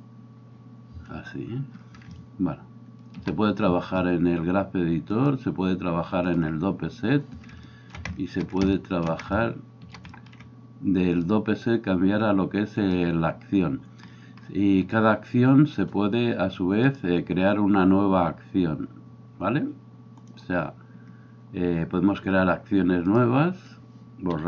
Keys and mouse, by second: 0.0-5.2 middle drag, 0.0 i, 5.2-20.4 drag, 20.4-23.2 middle drag, 23.2-24.4 drag.